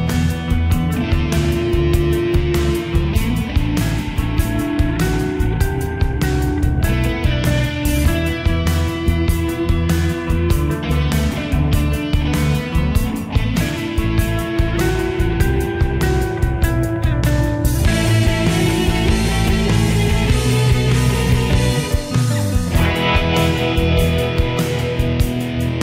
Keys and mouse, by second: 3.3 click, 18.5 click.